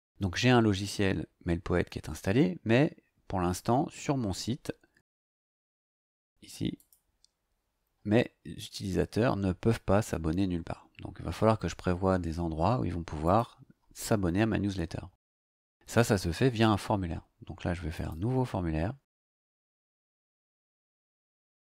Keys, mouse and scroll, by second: 5.2 ctrl+click, 6.7 click, 8.3-9.5 scroll down 4, 10.0-10.9 scroll down 4, 10.9 scroll up 2, 11.0-11.3 scroll down 2, 11.3-11.6 scroll up 2, 11.6-13.2 scroll down 2, 13.2 click, 14.0 click, 17.9 click.